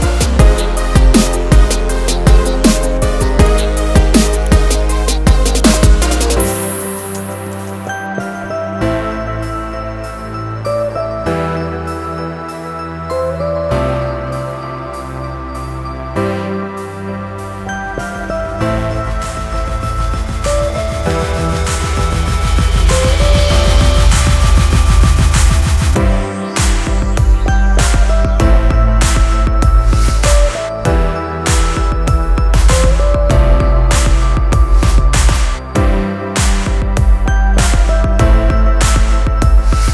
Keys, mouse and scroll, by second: 0.1 Page_Down, 1.1 scroll up 1, 1.8 Page_Up, 2.5-2.9 scroll down 1, 3.0 click, 3.7 click, 5.0 ctrl+c, 5.7 click, 6.4 click, 7.2 click, 8.0 ctrl+v, 8.5-8.9 scroll down 1, 9.1 click, 9.6 scroll down 1, 10.4 click, 11.2-11.6 scroll up 1, 14.3 click, 14.8 scroll up 1, 15.1 scroll down 1, 16.7 right click, 17.4 click, 19.1-19.6 scroll down 1, 19.6 scroll up 1, 21.1 Left, 24.8 scroll down 1, 25.3 click, 26.7 F4, 28.8 scroll down 1, 29.5 click, 29.8-30.2 scroll down 1, 30.2 scroll up 1, 30.9 scroll down 1, 31.1 click, 31.7 click, 33.0 click, 33.4 click, 34.3 double click, 35.9 click, 37.0 ctrl+c, 37.9 click, 38.7 click.